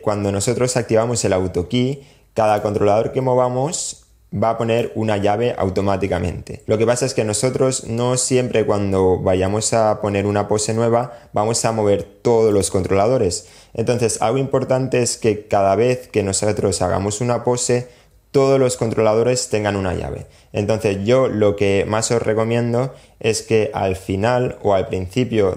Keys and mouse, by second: 3.0-4.0 drag.